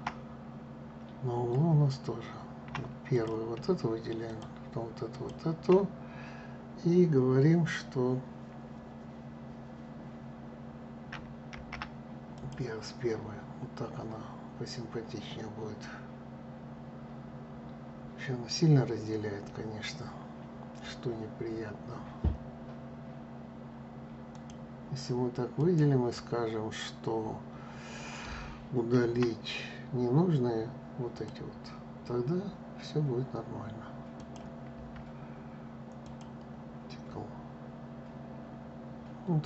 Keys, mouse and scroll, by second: 0.0-0.8 scroll up 2, 0.8-2.8 scroll down 1, 2.8 click, 3.9 shift+click, 4.8 shift+click, 11.2 alt+m, 13.0-13.5 scroll down 2, 17.6-18.4 scroll down 2, 19.3-19.9 scroll up 2, 24.0 click, 25.3-28.7 right drag, 28.7 Delete, 33.8 click, 34.4 Delete.